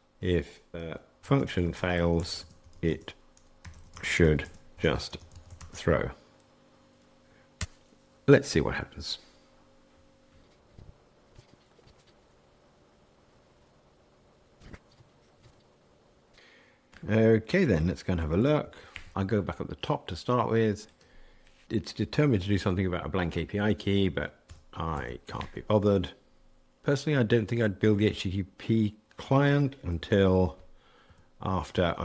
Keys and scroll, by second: 18.6 shift+super+F12, 24.4 super+BackSpace, 30.1 super+x.